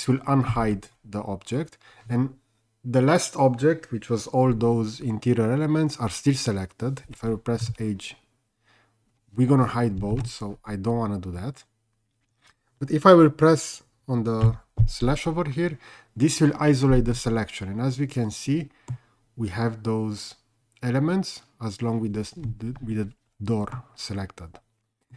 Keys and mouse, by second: 0.5 alt+h, 7.7 h, 10.2 ctrl+z, 17.1-18.9 middle drag, 23.8-25.1 middle drag.